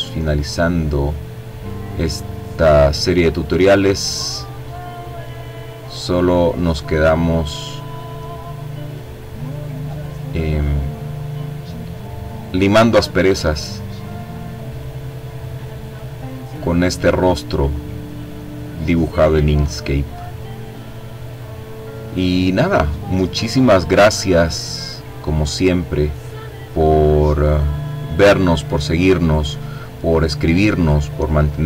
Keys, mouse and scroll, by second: 1.7-3.5 drag, 3.9 click, 5.3-6.7 drag, 6.7 click, 10.6 click, 12.8-13.8 drag, 13.8 click, 14.6 click, 15.4-17.2 drag, 17.4 click, 21.4-22.9 drag, 23.6-25.6 drag, 26.1-26.8 scroll up 2, 26.9-27.5 scroll down 2, 28.8 click, 30.3-31.6 drag.